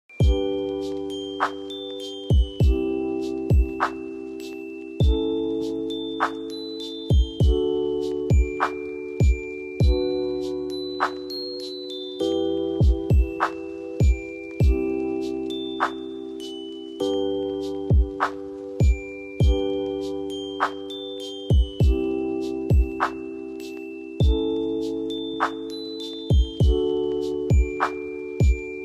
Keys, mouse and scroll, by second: 0.7 ctrl+click, 1.3 space, 2.2-4.5 drag, 4.5 right click, 5.1 click, 6.2 F2, 6.7 click, 7.5 F2, 7.9 click, 10.1 F2, 10.4 click, 11.7 click, 12.9 F4, 13.6 click, 14.9 F2, 15.2-23.4 drag, 23.4 space, 24.3 click, 27.7-28.8 ctrl+drag.